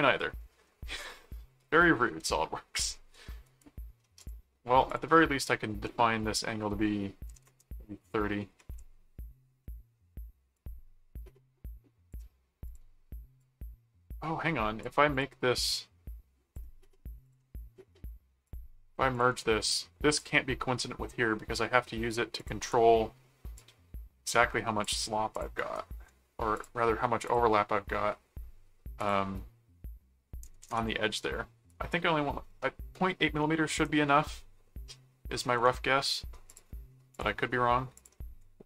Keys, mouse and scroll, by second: 0.6 middle click, 3.4 right click, 4.2 click, 4.9 click, 9.6 middle click, 10.6-12.1 drag, 12.7 click, 13.4-14.8 drag, 15.1 click, 16.0 click, 17.2 ctrl+click, 18.4 click, 19.1 click, 20.1 click, 22.4 click, 23.6 click, 25.3 click, 25.6 right click, 26.5 shift+click, 27.3 shift+click, 29.0 click, 31.5-32.5 scroll up 2, 32.5 scroll up 1, 32.6 middle click, 35.1 scroll up 2, 35.4 right click, 36.5 click, 37.1 click, 37.9 click.